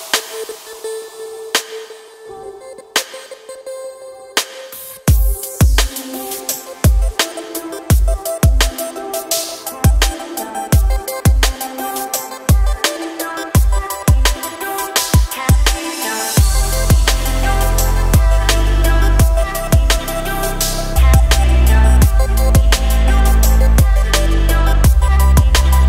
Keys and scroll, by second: 1.9 s, 7.5 s, 12.5 s, 18.0 s.